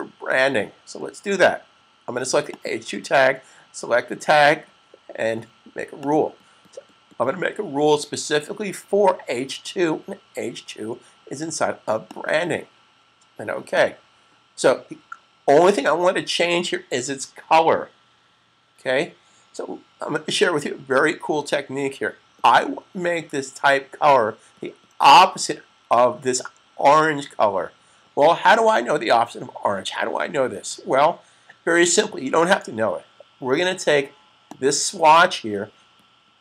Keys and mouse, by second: 2.5 click, 5.7 click, 11.7 click, 34.4 click.